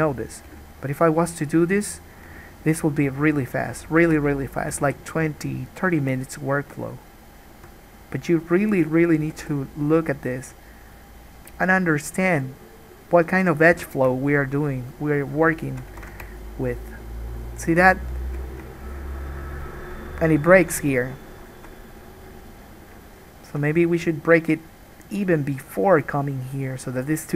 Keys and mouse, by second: 0.3 middle click, 0.3 right click, 0.7 g, 3.2 middle click, 3.3 click, 4.1 shift+middle click, 4.3-18.6 drag, 4.9 g, 7.7 alt+a, 8.6 middle click, 8.6 right click, 9.5 g, 13.9 3, 14.0 middle click, 14.0 right click, 16.2 ctrl+z, 18.6-23.4 shift+middle drag, 23.4-27.3 shift+drag.